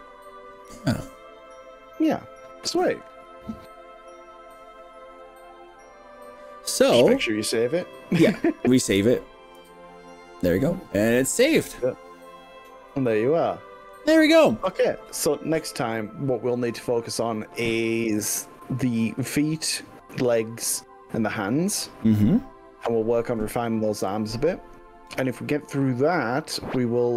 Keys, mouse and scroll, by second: 9.6 ctrl+s.